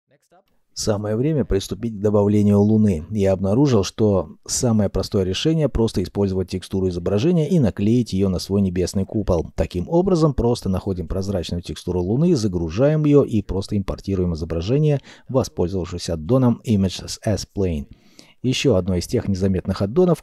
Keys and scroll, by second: 5.8 ..